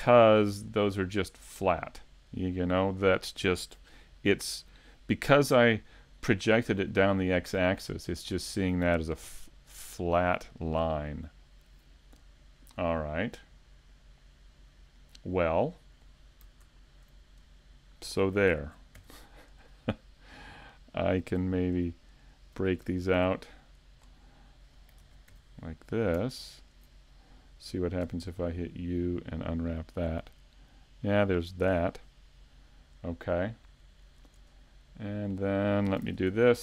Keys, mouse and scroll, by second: 0.2 middle click, 12.7 scroll down 3, 13.3 middle click, 15.7 shift+middle click, 17.4 scroll up 4, 18.5 ctrl+Tab, 19.6 right click, 20.0 middle click, 22.2 shift+right click, 23.2 ctrl+e, 24.3-24.7 scroll down 2, 25.0 ctrl+Tab, 26.6 alt+right click, 27.0-27.4 scroll down 2, 28.0 u, 31.7 scroll down 3, 31.7 a, 33.5 middle click, 34.5 scroll up 3, 36.0 ctrl+Tab.